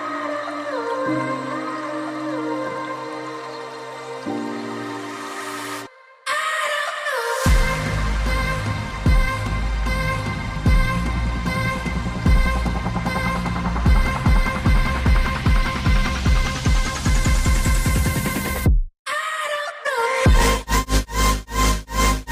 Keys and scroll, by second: 1.6 typing, 1.9 Return, 5.4-5.8 typing, 7.8-8.2 typing, 11.9 typing.